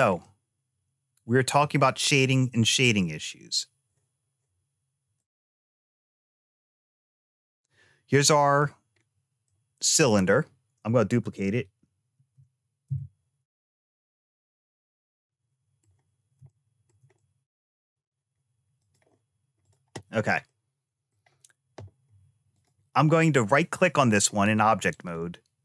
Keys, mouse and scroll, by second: 0.1-1.5 middle drag, 5.0 click, 6.1 click, 7.1-8.5 middle drag, 8.8-9.1 scroll down 1, 9.3 middle click, 12.0 shift+d, 14.5-15.7 middle drag, 16.3 shift+middle click, 17.0 middle click, 18.7 click, 19.5 click, 20.3 middle click, 22.4 click, 24.8-25.6 right drag.